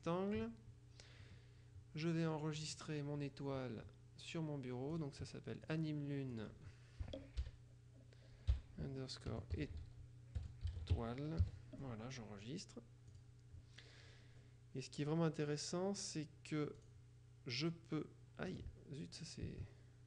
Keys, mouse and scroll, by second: 0.1 click, 2.6 click, 5.0 click, 5.8 click, 6.5 click, 7.6 Left, 9.2-12.1 typing, 13.2 click, 16.9 click, 18.6 click.